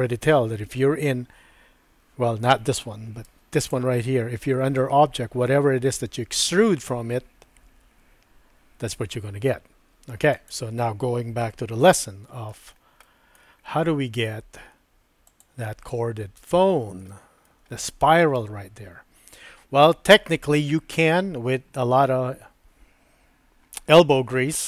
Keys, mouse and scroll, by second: 3.3 Tab, 10.3 click, 11.4 shift+middle click, 12.0 click, 13.1 shift+click, 13.4 shift+middle click, 15.3 click, 17.1 shift+middle click.